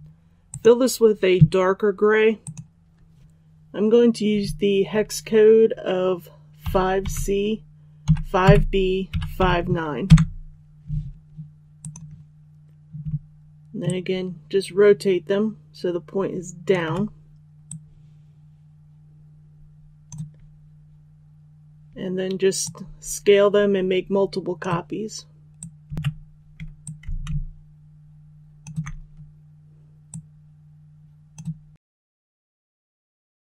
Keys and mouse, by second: 0.4 click, 6.5 KP_5, 8.3 KP_5, 9.0 KP_5, 9.3 KP_9, 11.7 click, 13.8-16.6 shift+drag, 17.6-25.9 drag, 25.9 ctrl+z, 26.7-33.4 drag.